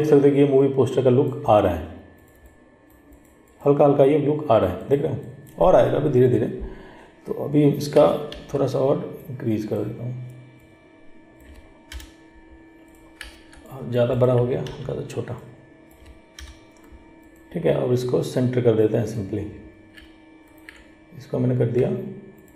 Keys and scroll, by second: 8.5 ctrl+t, 14.8 ctrl+t.